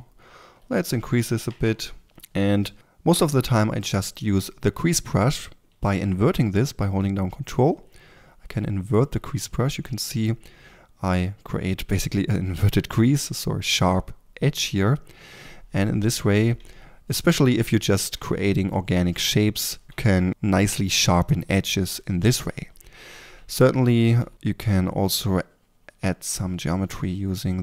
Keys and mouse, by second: 2.0-3.3 drag, 4.3 click, 4.3 f, 5.6 f, 16.3-19.8 drag, 20.3 f, 22.4-26.5 drag, 23.3 f, 24.1 3, 24.3 f.